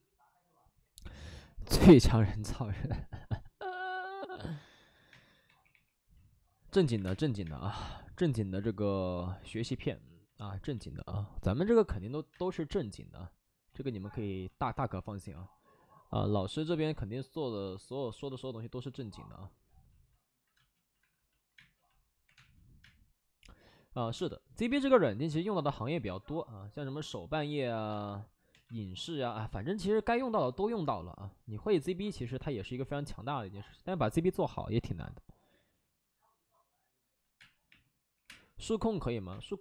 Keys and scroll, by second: 5.0 space, 5.4 3, 5.6 3, 6.6 ctrl+z, 6.9-7.9 typing, 13.6 ctrl+z, 14.1 ctrl+z, 15.0 alt+s, 16.4 ctrl+z, 16.5 ctrl+z, 18.0 ctrl+z, 18.7 ctrl+z, 20.5-22.7 typing, 20.9 alt+s, 24.6 space, 28.4 2, 37.3 space, 37.6 3, 38.0 3, 38.2 space, 39.2 space.